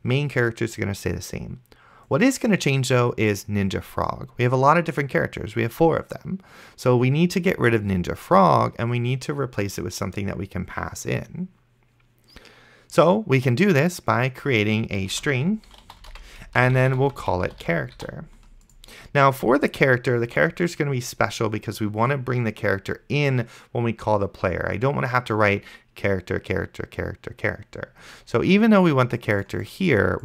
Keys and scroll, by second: 15.2-18.5 typing.